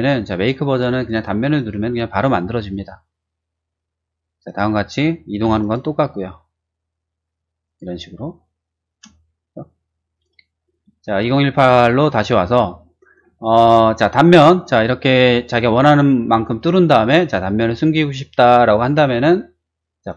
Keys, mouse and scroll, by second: 1.5 click, 2.7 click, 4.4 click, 5.4 m, 5.6 click, 7.6 click, 8.8 space, 10.1 click, 11.0 shift+middle click, 11.8 shift+middle click, 12.4 shift+middle click, 12.7 shift+middle click, 14.8-16.4 middle drag, 16.5-19.0 middle drag, 20.0 click.